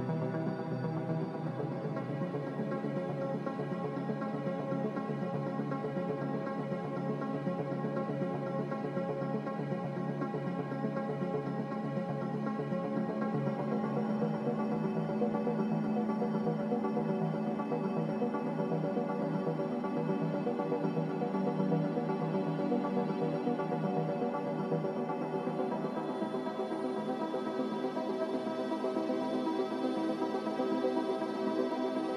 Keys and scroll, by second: 6.3 ctrl+z, 19.9 ctrl+z, 22.9 ctrl+z, 27.5 ctrl+z, 28.0 ctrl+z, 28.5 ctrl+z.